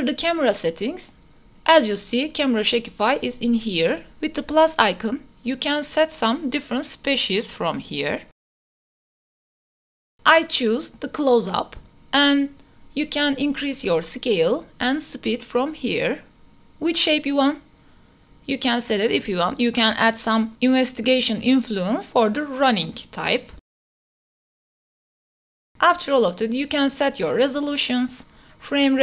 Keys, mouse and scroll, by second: 3.5 click, 5.2 click, 5.7 space, 8.5 space, 9.4-12.1 drag, 12.1 space, 13.9-15.0 drag, 15.2 space, 17.8 space, 18.8 click, 19.4 space, 24.4 space, 25.9 click.